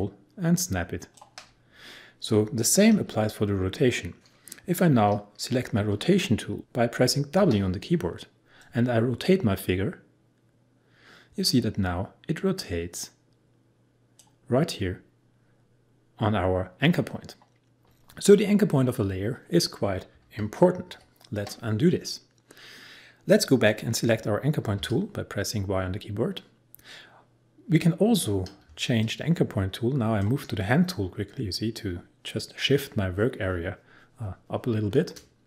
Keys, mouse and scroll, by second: 7.4 w, 8.6-20.4 drag, 20.9 ctrl+z, 24.7 y, 28.7 space, 29.0 click, 29.2 space, 34.7 space.